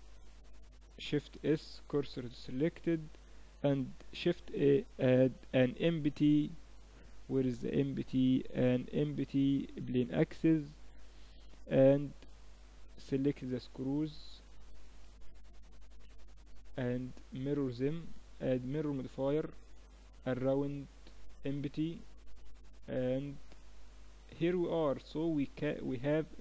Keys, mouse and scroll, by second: 1.0 shift+s, 3.9 shift+a, 11.9-13.6 right drag, 13.6-14.9 middle drag, 14.9-16.6 right drag, 16.6-19.3 drag, 20.0-21.9 drag, 21.9-26.4 middle drag.